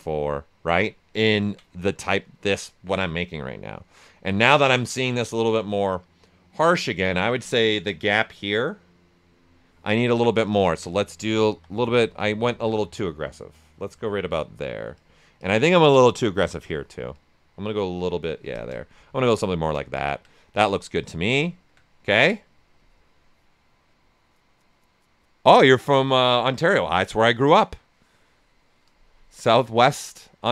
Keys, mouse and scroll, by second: 0.8 alt+right click, 10.4-12.1 ctrl+drag, 12.1-17.1 drag, 17.1-18.5 drag, 18.9 right click, 19.2 q, 19.5 ctrl+right click, 20.7 alt+right click, 21.4 ctrl+alt+right click.